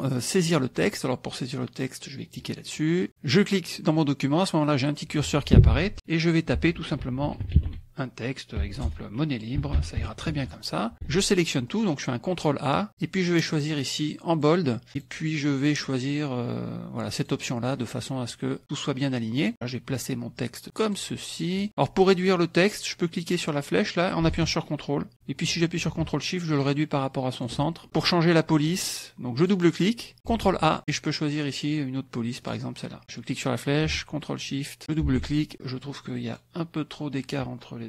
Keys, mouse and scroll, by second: 2.3 click, 2.6 click, 3.3 click, 6.5-10.7 typing, 8.8 Return, 11.0 ctrl+a, 13.5 click, 14.3 click, 14.9 click, 17.2 click, 19.4-21.1 drag, 23.5-27.7 drag, 29.5 click, 30.3 ctrl+a, 30.8 click, 32.5 click, 33.2-34.8 drag, 35.1 ctrl+shift+a, 36.2 click.